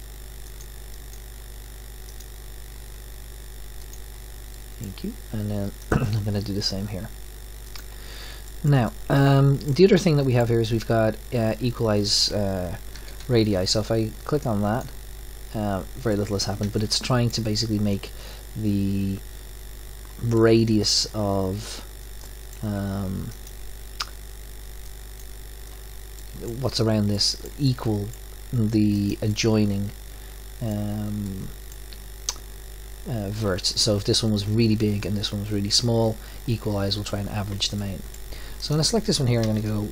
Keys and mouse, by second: 0.5-2.0 drag, 3.9 click, 4.5 middle click, 5.4 click, 7.4-9.3 drag, 12.9 a, 13.2 a, 14.4 click, 16.1 middle click, 18.8-20.3 middle drag, 23.3-25.2 middle drag, 25.2 click, 28.9-31.4 middle drag, 37.5 middle click, 39.5 middle click.